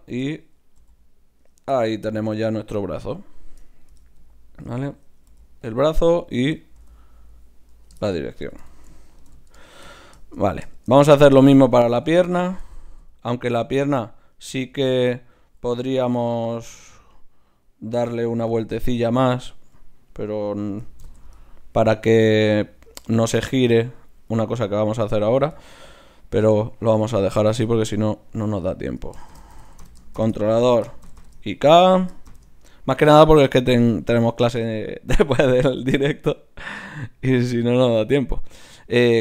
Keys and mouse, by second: 0.0 right click, 0.3 click, 0.3-1.8 middle drag, 0.8 g, 2.0 g, 5.6 g, 6.8 g, 8.4 a, 8.6 a, 9.2 alt+g, 12.0 KP_3, 13.6 Tab, 14.4 click, 14.7 z, 18.4 e, 21.0 alt+p, 21.4 right click, 25.6 middle click, 26.6-28.3 right drag, 27.6-30.9 drag.